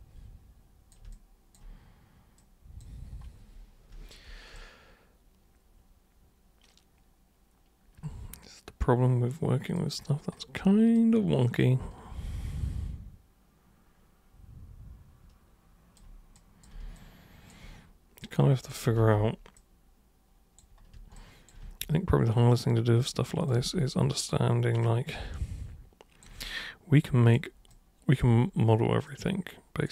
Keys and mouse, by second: 1.1-1.6 alt+super+drag, 2.4 super+click, 4.6-9.8 alt+super+drag, 11.0-16.0 alt+super+drag, 16.4 super+click, 17.0-17.5 alt+super+drag, 18.2 super+click, 19.6 super+click, 21.2 alt+super+click, 21.6 super+e, 22.5-23.5 super+drag, 23.6 super+w, 24.8 super+click, 26.5 alt+super+click, 27.7 alt+super+click, 29.0 super+click.